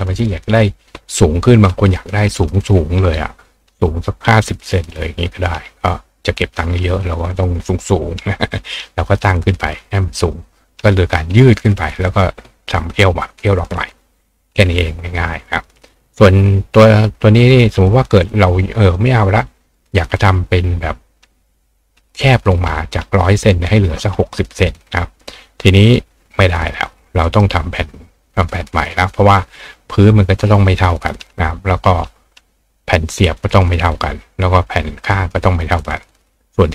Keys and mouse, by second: 17.5-18.9 drag, 27.2 right click.